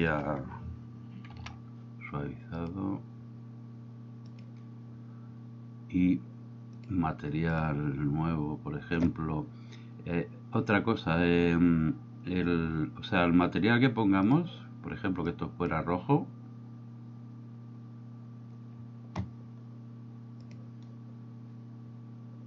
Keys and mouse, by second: 1.4 ctrl+2, 2.7-4.5 drag, 6.9 click, 7.6 click, 14.4 click.